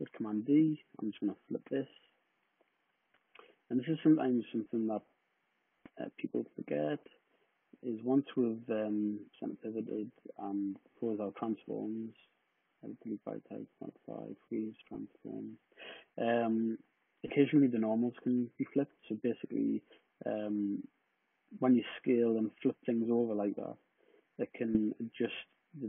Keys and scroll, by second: 1.1-2.0 typing.